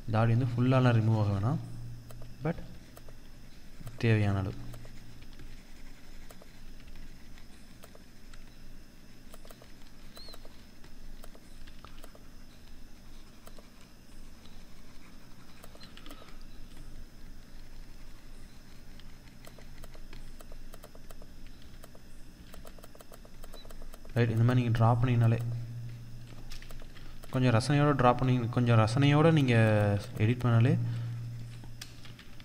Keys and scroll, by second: 26.2 ctrl+z, 31.4 ctrl+z.